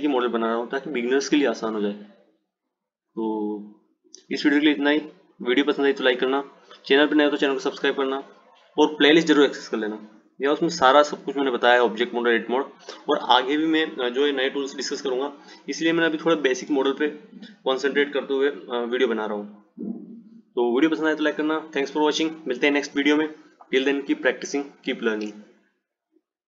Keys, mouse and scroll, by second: 2.2-4.5 drag, 11.2-14.3 drag.